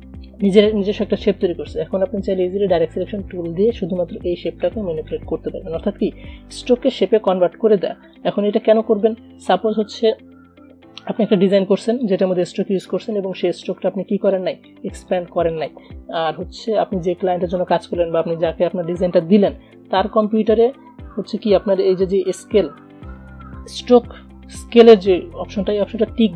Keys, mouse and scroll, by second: 2.5-6.3 drag, 6.3 ctrl+z, 7.7 v, 8.2 click, 8.6 alt+scroll down 1, 9.1 space, 9.1 click, 9.5 space, 11.3-14.4 drag, 14.4 space, 14.5 click, 14.9 space, 15.2-26.3 drag.